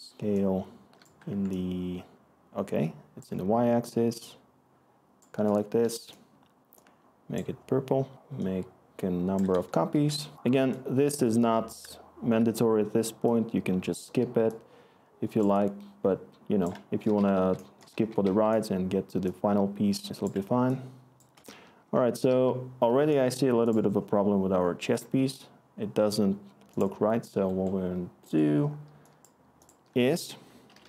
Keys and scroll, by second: 5.5-6.8 typing, 9.5 d, 9.8 q, 16.8-18.7 typing, 19.8-22.4 typing, 25.0 s, 30.0 Tab, 30.4-30.8 typing.